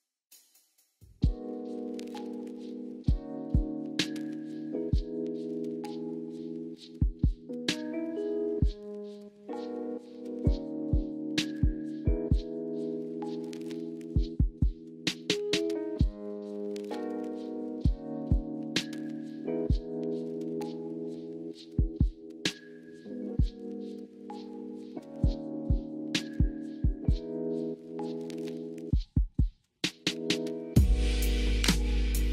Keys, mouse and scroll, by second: 0.7 shift+a, 2.3 shift+middle click, 2.7 drag, 4.0 click, 6.2 s, 7.5 shift+middle click, 7.9 s, 9.4 KP_3, 10.2 shift+middle click, 10.8 g, 11.4 drag, 11.9 shift+middle click, 12.6 shift+middle click, 12.9 Tab, 14.8 s, 15.1 y, 17.7 r, 18.5 click, 20.0 ctrl+z, 20.5 Tab, 21.6 r, 22.9 g, 24.0 r, 24.9 click, 25.7 Tab, 26.4 click, 27.7 e, 28.7 r, 29.8 g, 30.7 s, 31.2-32.3 drag.